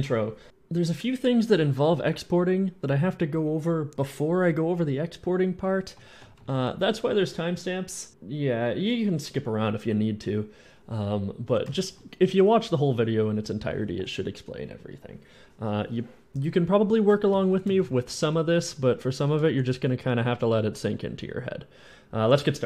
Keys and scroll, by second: 5.8 w, 6.1 d, 6.3 s, 6.7 s, 10.0-12.1 typing, 17.1-20.9 typing.